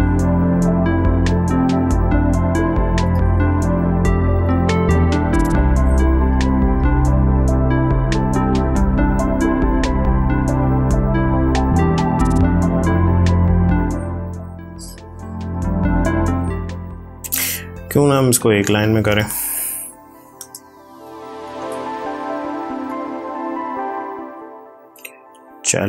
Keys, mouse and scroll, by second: 2.9 ctrl+a, 4.3 click, 5.3 ctrl+d, 6.7 click, 14.5 click, 14.6 click, 17.7 t, 18.5 click, 19.7 Delete, 20.2 space, 25.6 click.